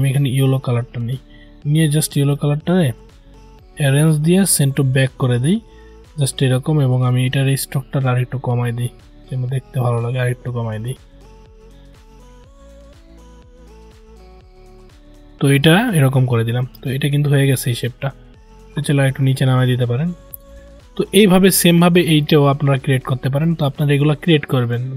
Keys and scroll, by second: 23.0 ctrl+z.